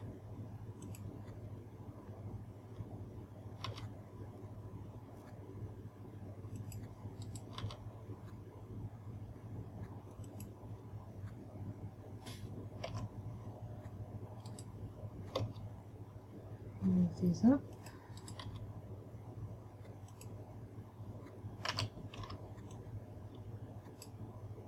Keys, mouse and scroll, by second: 1.4 click, 4.2 g, 7.2 click, 7.8 right click, 8.0 g, 10.9 click, 13.4 a, 14.9 right click, 15.9 g, 18.4 click, 18.8 right click, 20.0 g, 20.9 click, 22.2 a, 22.9 b.